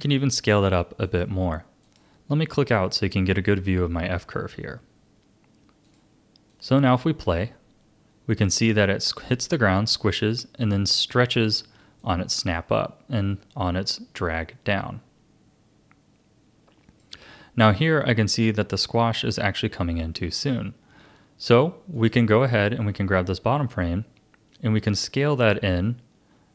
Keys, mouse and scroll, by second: 0.0 s, 1.8 click, 5.8-9.5 drag, 11.3-15.0 drag, 21.9 click, 23.5 s.